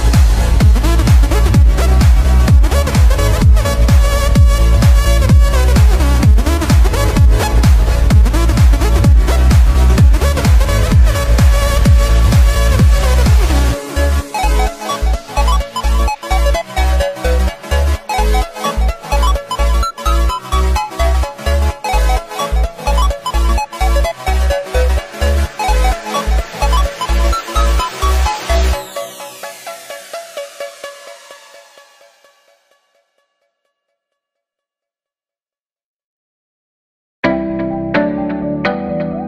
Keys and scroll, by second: 0.3 ctrl+=, 3.7 space, 5.1 ctrl+-, 5.7 ctrl+=, 12.3 space, 17.4 space, 25.0 space, 27.5 ctrl+-, 28.8 space, 29.7 ctrl+z.